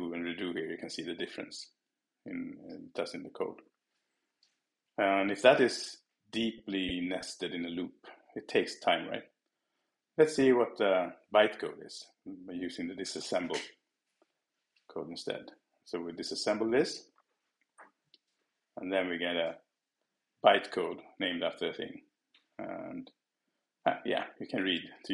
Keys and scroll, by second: 0.0 super+z, 0.6 shift+super+z.